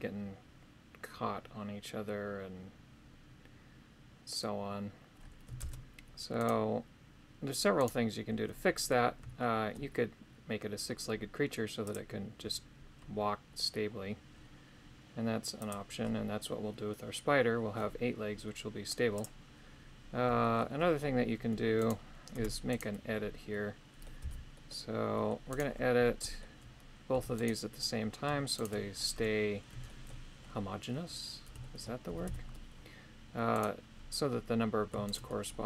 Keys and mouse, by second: 5.6 shift+space, 6.4 right click, 7.8 right click, 9.4 shift+middle click, 11.9 click, 15.6 click, 19.1 click, 20.4 shift+middle click, 22.3 Tab, 22.7 right click, 23.5 middle click, 24.2 c, 26.2 middle click, 27.2 Tab, 27.4 right click, 28.6 shift+right click, 29.1 Tab, 29.9 shift+middle click, 31.7 shift+middle click, 32.1 a, 32.3 a, 33.6 right click, 35.1 shift+right click.